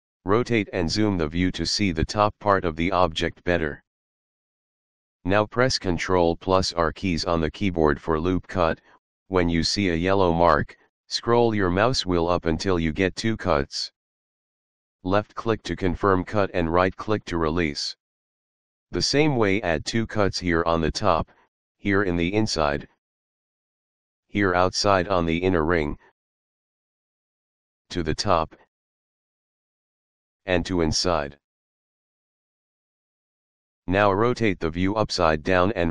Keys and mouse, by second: 1.0 middle click, 2.7 middle click, 8.4 ctrl+r, 15.7 click, 16.8 right click, 19.2 ctrl+r, 20.2 click, 22.9 ctrl+r, 23.5 click, 23.9 right click, 25.6 ctrl+r, 26.7 click, 27.1 right click, 28.7 ctrl+r, 29.4 click, 30.0 right click, 32.5 click, 33.1 right click, 34.0 middle click, 34.7 middle click.